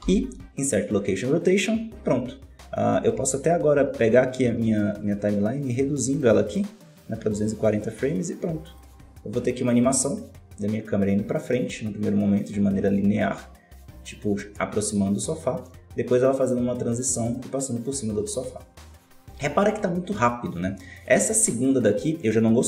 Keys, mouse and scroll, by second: 4.7-7.7 shift+drag, 8.6-12.6 drag, 20.9-22.6 drag.